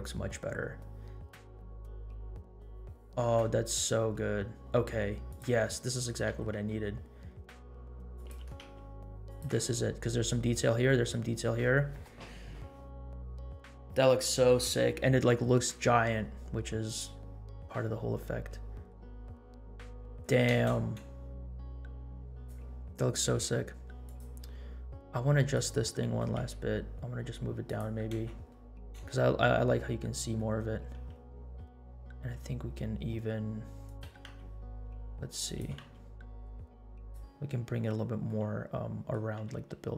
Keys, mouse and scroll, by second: 5.8 middle click, 6.3 r, 8.3 g, 16.9-17.2 drag, 17.8-18.9 middle drag, 20.5 space, 22.3 click, 24.2 click, 25.5 click, 26.1 g, 28.2 space, 29.0 space, 30.3-31.2 middle drag, 31.6 middle drag, 32.0 r, 34.0 r, 35.6 g, 38.2 middle click, 39.3 r.